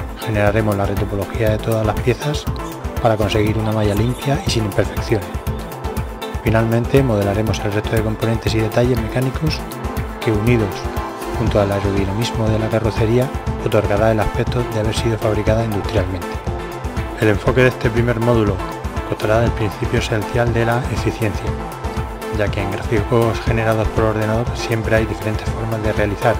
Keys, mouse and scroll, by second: 0.8-1.6 middle drag, 1.6-2.1 right drag, 1.8 e, 2.3 middle click, 2.3 right click, 3.0-3.5 right drag, 3.7-5.3 right drag, 5.3 middle click, 5.7 Tab, 5.7 KP_1, 6.3 alt+r, 8.5-9.6 middle drag, 9.6 click, 11.0-11.9 middle drag, 12.0-16.2 middle drag, 16.2-17.7 right drag, 16.8-19.0 middle drag, 19.5 e, 20.6-23.2 right drag, 22.6 s, 23.5-26.3 middle drag.